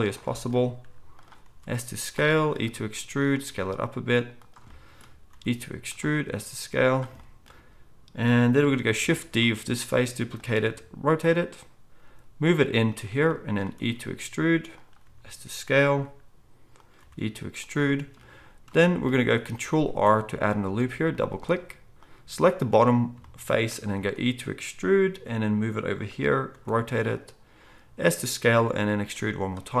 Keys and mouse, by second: 0.8 g, 1.4 s, 2.6 e, 3.4 s, 5.3 e, 6.1 s, 9.3 shift+d, 10.6 r, 12.0 g, 13.8 e, 15.0 s, 16.0 g, 17.0 e, 19.8 ctrl+r, 22.8-25.0 drag, 24.0 e, 25.0-29.8 middle drag, 25.0 g, 26.5 r, 27.6 s, 28.6 e.